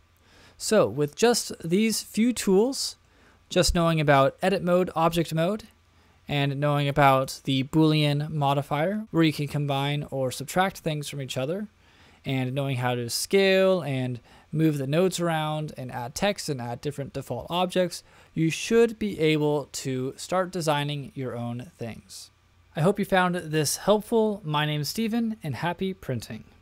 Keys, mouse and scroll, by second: 1.5 middle click, 2.2-2.6 shift+middle drag, 2.8 middle click, 4.1 click, 5.2 click, 7.1-12.0 drag.